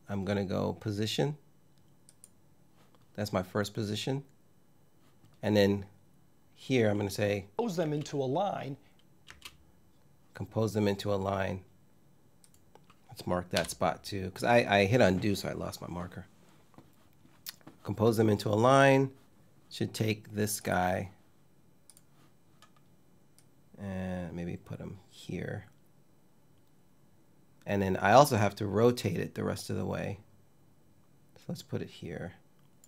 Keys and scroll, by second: 7.5 space, 8.9 space, 13.2 m.